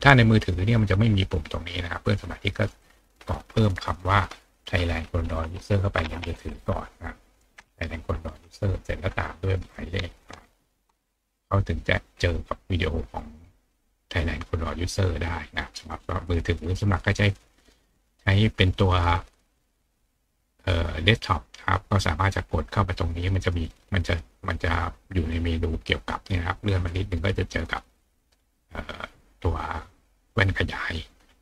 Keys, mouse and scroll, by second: 2.8 click, 15.0 click, 17.3 click, 24.6 click, 25.3 click, 26.5 click, 28.3 click, 31.1 click.